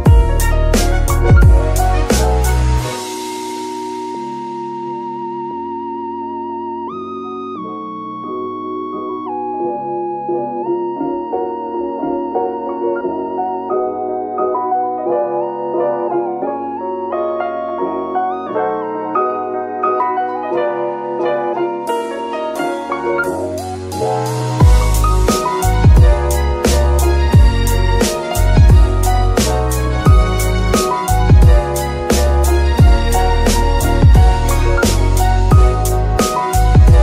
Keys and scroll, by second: 5.3 KP_3, 7.3 g, 8.0 Escape.